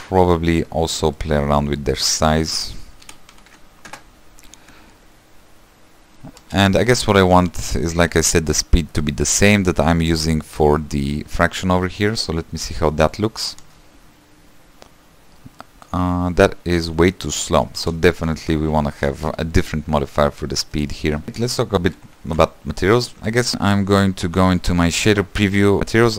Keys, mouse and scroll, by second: 0.2 scroll up 2, 0.4 shift+middle click, 0.9-1.3 scroll down 6, 1.3 shift+middle click, 2.0-2.5 scroll up 1, 2.6-5.6 drag, 5.9 scroll down 1, 6.5 space, 13.7 space, 15.7 middle click, 16.1-16.6 scroll up 2, 17.9 space, 18.2 ctrl+z, 21.4 space, 21.8-23.5 middle drag, 23.5 =, 24.5 click, 25.8-26.1 drag.